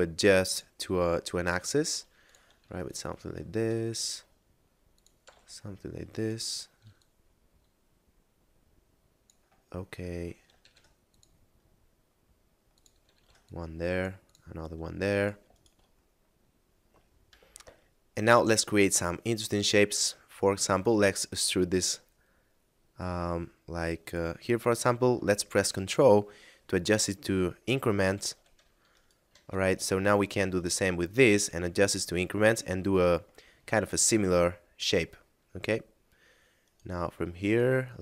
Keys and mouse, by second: 0.5 click, 0.9 s, 2.2 click, 2.5 ctrl+r, 2.7 click, 3.0 right click, 3.6 s, 4.8 click, 5.3 g, 5.3 z, 6.1 right click, 6.9 click, 9.7 middle click, 10.6 ctrl+r, 10.9 click, 13.1 ctrl+r, 13.4 click, 15.1 right click, 15.5 shift+right click, 17.3 F9, 20.7 e, 28.1 ctrl+click, 28.9 shift+right click, 29.4 right click, 29.9 shift+right click, 30.1 e, 31.9 ctrl+click, 32.9 a, 33.6 middle click, 36.6 right click, 37.4 shift+right click.